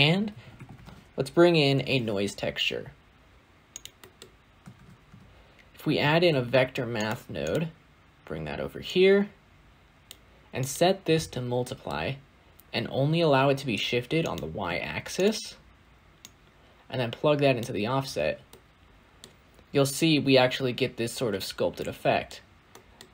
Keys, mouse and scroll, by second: 1.6 shift+a, 10.9-15.1 drag, 17.5 click, 18.1 scroll down 2, 18.4-19.1 middle drag, 19.1-19.6 scroll up 5, 19.6-21.4 scroll down 2.